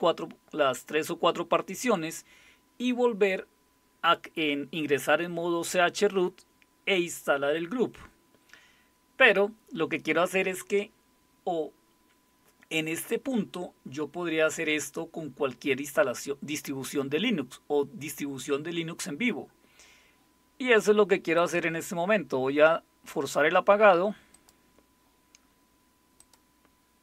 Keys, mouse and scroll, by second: 21.4 click, 24.3 click, 26.2 click.